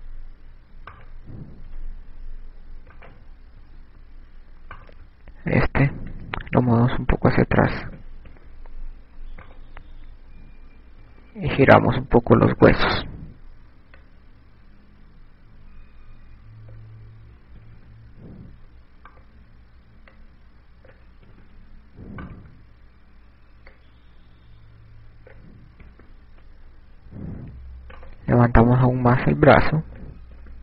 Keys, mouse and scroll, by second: 1.5 i, 2.5 right click, 3.3 i, 4.5 right click, 5.2 i, 6.4 right click, 7.9 click, 9.9 i, 11.0 right click, 13.0 i, 14.3 click, 20.3 right click, 21.8 click, 23.2 i, 24.0 right click, 25.4 click, 29.7 right click.